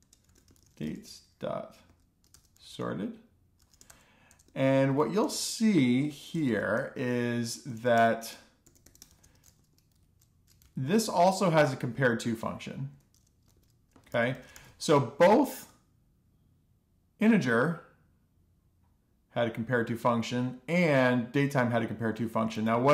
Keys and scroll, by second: 0.0-12.5 typing, 7.4 Left, 13.9 Return, 14.5 b, 15.1 super+Right, 15.3 ;, 15.5 alt+shift+f.